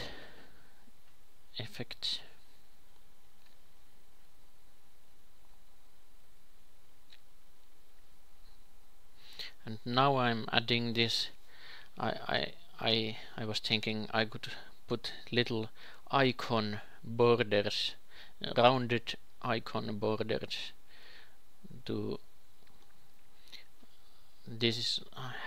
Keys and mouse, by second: 6.6-11.9 drag, 7.2 shift+s, 10.0 shift+a, 13.1-14.9 drag, 13.6 ctrl+c, 14.9 a, 15.1-16.9 drag, 15.5 g, 20.4 Tab, 21.8 ctrl+shift+b.